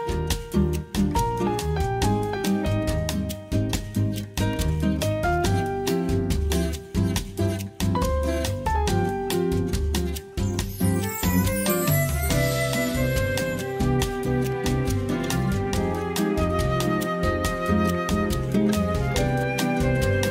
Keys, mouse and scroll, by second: 1.4-1.7 shift+middle drag, 2.0 shift+middle click, 3.4 shift+a, 5.5 s, 6.3-8.6 drag, 9.1 click, 11.1 Tab, 12.2 click, 14.7 click, 15.5 alt+z, 15.8 click, 16.7 x, 17.8-18.9 drag, 19.4 click.